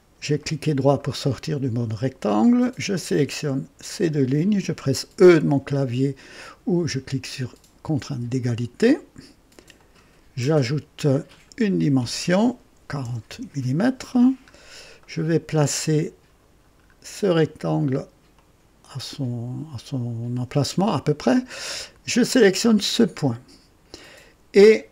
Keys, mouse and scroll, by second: 0.4-1.0 right drag, 1.1 scroll up 1, 2.9 click, 3.8 click, 8.0 e, 9.7 click, 11.2 click, 12.7 KP_4, 13.0 KP_0, 13.2 Return, 14.5-14.8 scroll down 1, 15.0-16.2 right drag, 16.4-16.8 scroll down 1, 18.3-20.6 drag, 22.9 click.